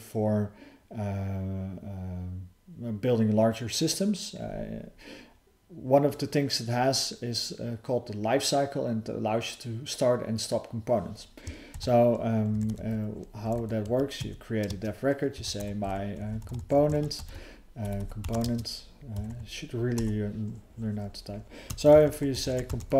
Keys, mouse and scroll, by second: 11.7 (, 14.2 Tab, 17.8 BackSpace, 18.0 BackSpace, 19.1 [, 19.3 ].